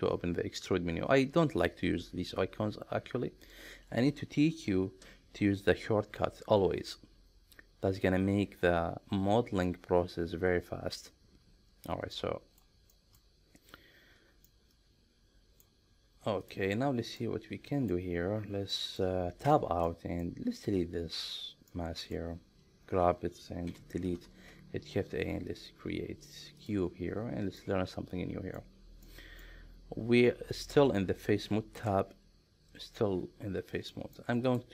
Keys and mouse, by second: 12.2 middle click, 13.0 shift+middle click, 14.5-15.7 middle drag, 16.4 click, 17.2 middle click, 18.7 middle click, 19.5 Tab, 19.9-20.3 middle drag, 21.7 middle click, 23.7 Delete, 24.4 shift+a, 27.6-28.6 middle drag, 29.1 middle click, 31.8 Tab, 34.0 middle click.